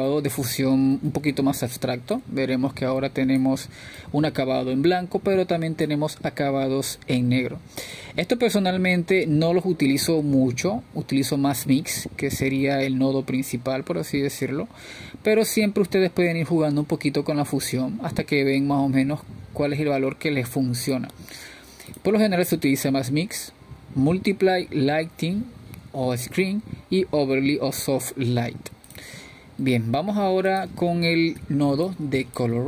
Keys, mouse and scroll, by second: 0.0-1.8 drag, 5.6-9.4 drag, 9.4-10.1 scroll up 2, 10.1 scroll down 1, 10.3 middle click, 10.9-11.3 scroll down 1, 11.3-15.0 middle drag, 15.0-32.6 drag.